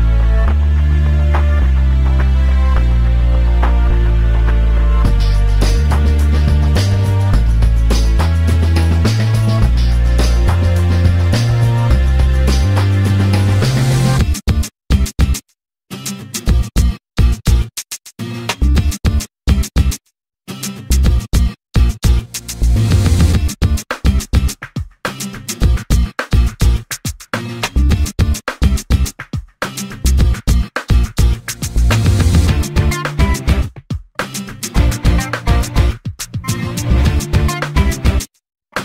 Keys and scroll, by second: 0.8 l, 9.9 2, 11.7 Return, 13.9 8, 15.1 Return, 17.7 space, 19.3 m, 22.8 p, 29.9 l, 34.4 r.